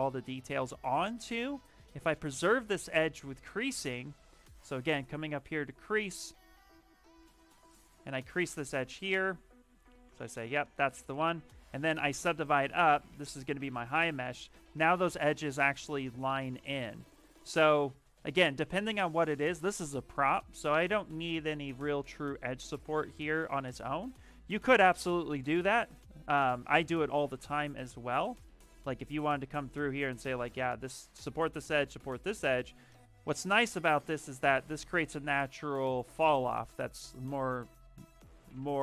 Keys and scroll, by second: 6.4-8.3 typing, 12.3 ctrl+d, 12.5 ctrl+d, 13.2 shift+f, 13.4 shift+f, 17.0 shift+f, 18.5 shift+f, 19.9 ctrl+z, 20.2 ctrl+z, 20.4 ctrl+z, 20.6 ctrl+z, 25.5 ctrl+z, 26.7 space, 34.3 d.